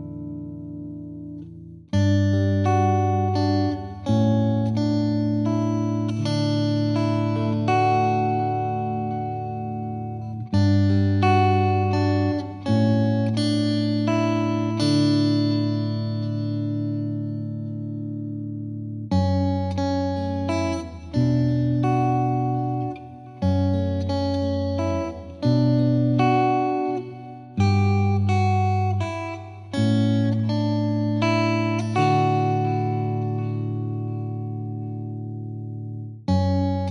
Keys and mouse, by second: 2.1 shift+click, 4.9 click, 6.3 click, 8.9 click, 10.3 click, 12.0 click, 12.8 shift+click, 15.9 click, 16.7 click, 18.1-19.2 drag, 19.6 click, 21.0-22.2 drag, 23.1-24.2 drag, 29.0 right click, 29.0 click, 29.8 click, 30.6 click, 31.1 click, 32.4 click.